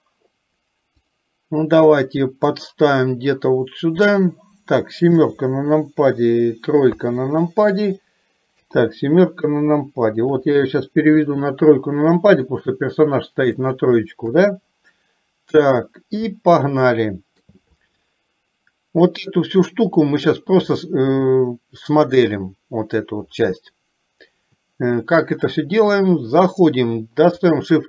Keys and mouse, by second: 2.6-4.2 drag, 5.2 KP_7, 10.5 r, 14.3 KP_3, 16.7 shift+middle click.